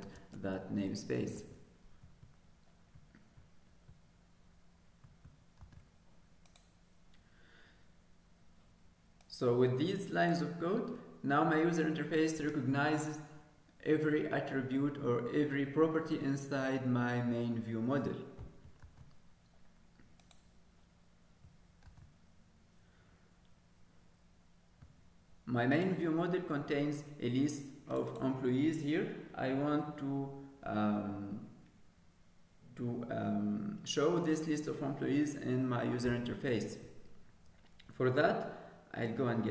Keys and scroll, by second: 1.3 ctrl+k, 6.0 ctrl+s, 19.2 ctrl+s, 22.9 ctrl+s.